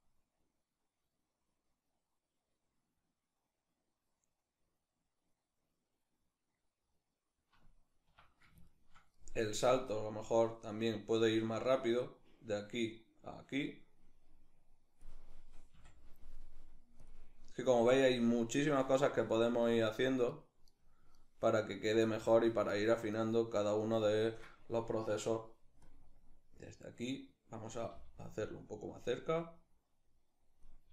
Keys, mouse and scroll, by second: 6.3-9.5 middle drag, 7.7 Escape, 9.5-10.5 drag, 10.8 click, 11.3 click, 11.8 click, 11.9 click, 13.0-16.7 drag, 18.4 right click, 19.0 shift+right click, 19.3 shift+right click, 19.9 shift+right click, 20.9 shift+right click, 21.4 shift+right click, 21.9 shift+right click, 22.8 shift+right click, 25.5-28.6 drag, 27.5 g, 29.1-30.9 drag, 30.5 g.